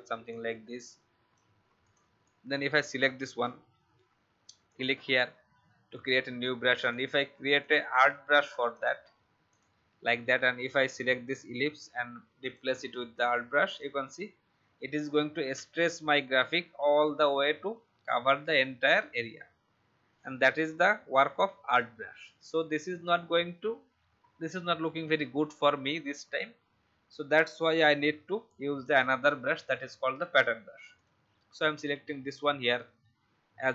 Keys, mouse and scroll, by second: 0.2 shift+click, 1.8 click, 27.9 ctrl+z, 28.8-33.7 drag.